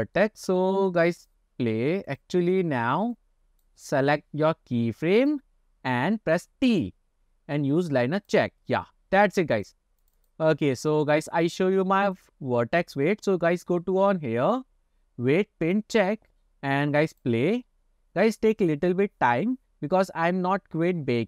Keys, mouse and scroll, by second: 0.2-0.7 middle drag, 1.3 click, 2.9 click, 3.2 click, 4.1-5.4 drag, 6.6 t, 9.7 click, 10.1 click, 12.2-16.2 drag, 17.2 click.